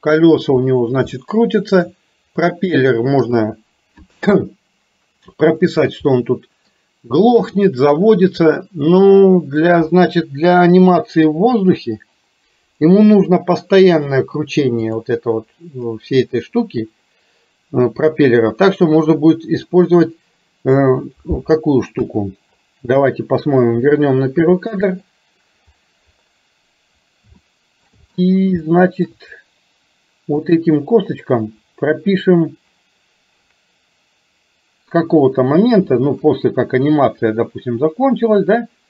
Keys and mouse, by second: 1.3 shift+middle click, 3.3 click, 6.3 middle click, 8.6-9.8 middle drag, 14.9 click, 22.0 KP_1, 25.0 click, 27.5 shift+middle click, 28.8 shift+middle click, 30.5 click, 37.0-38.8 drag.